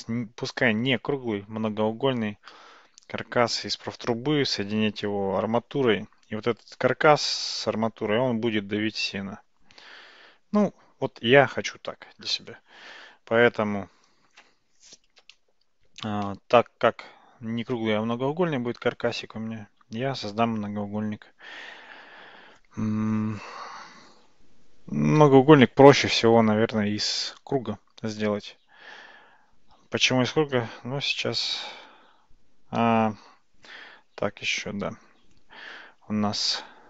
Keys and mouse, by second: 20.2 shift+a, 32.8 ctrl+z.